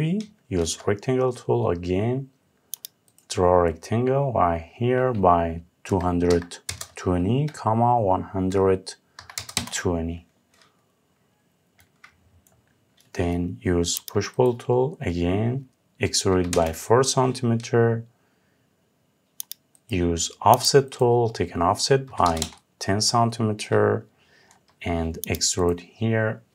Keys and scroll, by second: 9.2 Return, 16.1 Return, 22.0 Return.